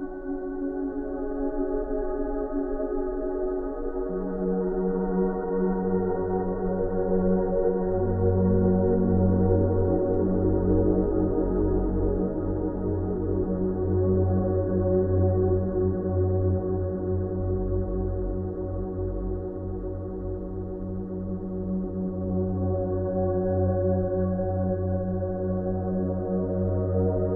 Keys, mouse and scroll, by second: 4.7 click, 7.5 alt+click, 8.8 alt+click, 9.5 click, 10.1 alt+click, 11.2 ctrl+d, 11.6 space, 11.8 right click, 12.0 click, 12.4 v, 12.7-13.6 space, 13.4 ctrl+click, 13.6 click, 19.2 right click, 19.9 click, 21.7 ctrl+a, 23.0 click, 24.7 ctrl+v, 25.2 space, 25.3 right click, 25.5 click, 26.5 space, 26.6-27.3 ctrl+click.